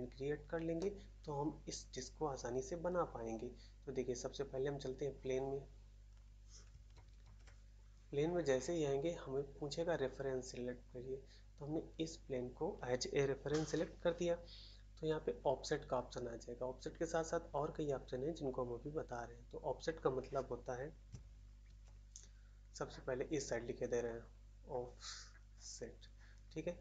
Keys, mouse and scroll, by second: 0.7 middle click, 6.9 shift+d, 21.6 shift+s.